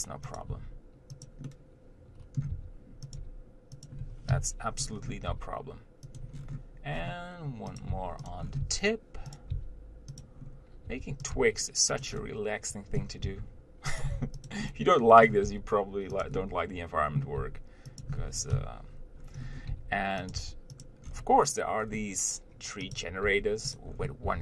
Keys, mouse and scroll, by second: 0.0 g, 0.8 s, 1.7-3.0 middle drag, 3.0 r, 3.4 g, 5.1-5.6 scroll up 1, 5.6 g, 6.6-7.7 scroll down 1, 7.7 scroll down 1, 8.0 click, 8.2 g, 8.7 scroll up 1, 8.9 r, 9.8 g, 10.7 scroll up 1, 11.1 r, 11.6 g, 12.4-13.5 middle drag, 13.5 r, 14.4 g, 14.9 middle click, 15.7 g, 16.7 middle click, 17.6 g, 19.6 scroll up 1, 19.9 g, 20.6 r, 21.3-22.1 scroll down 1, 22.1-23.2 scroll down 1, 23.2 click, 23.5 g, 24.2 scroll up 1.